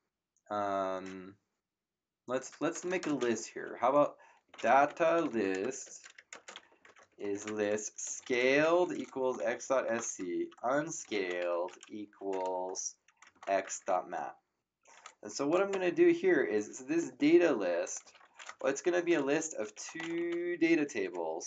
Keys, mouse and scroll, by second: 2.7 BackSpace, 4.2-14.3 typing, 15.2 Up, 15.7 Return, 17.8-21.3 typing, 17.8 click.